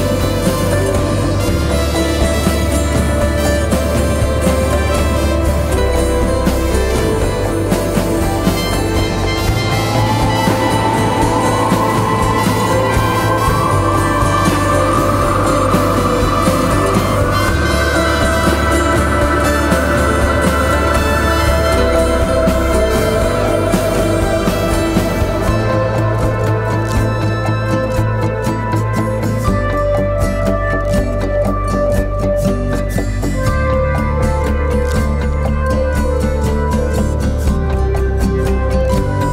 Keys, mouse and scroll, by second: 1.4-2.2 scroll up 1, 2.3-2.9 scroll down 1, 2.9 click, 6.0-6.9 scroll up 1, 6.9 click, 7.6 Right, 11.2 click, 13.0-14.7 typing, 13.2 click, 13.3 click, 14.1-14.7 scroll down 1, 21.0 click, 21.2-22.8 drag, 22.8-24.6 alt+drag, 24.9-26.4 drag, 32.9 click.